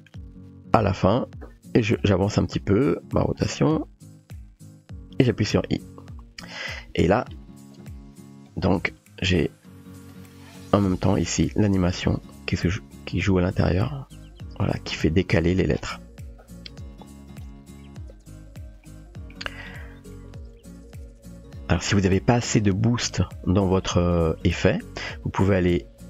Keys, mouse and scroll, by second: 2.1-5.3 drag, 8.1-8.5 drag, 8.8 space, 17.3 click, 18.9-19.3 shift+middle drag, 23.0 click.